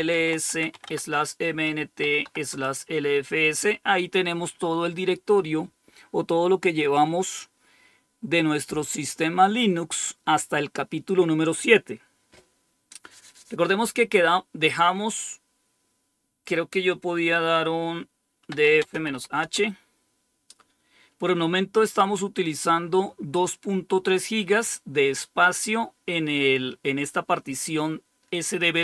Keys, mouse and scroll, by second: 0.0-2.6 typing, 18.3-19.6 typing, 22.3 click.